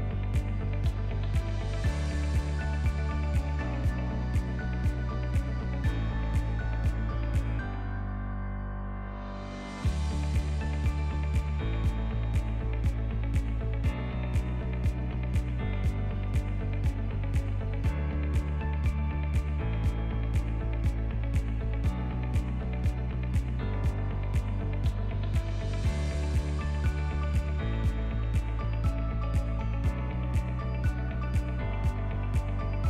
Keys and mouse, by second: 0.5 s, 2.2 s, 4.2 s, 6.1 s, 9.6 ctrl+a, 10.5 ctrl+s, 12.5-13.1 shift+drag, 13.5 click, 14.2 g, 16.0 g, 17.2-18.2 drag, 18.3 g, 20.2-20.6 middle drag, 21.1 KP_1, 21.8-22.2 shift+middle drag, 22.4 ctrl+middle drag, 23.1 click, 23.7 s, 26.7 click, 27.1 g, 27.1 z, 27.6-28.6 right drag, 28.8 z, 30.2 click, 30.6 click, 30.8 g.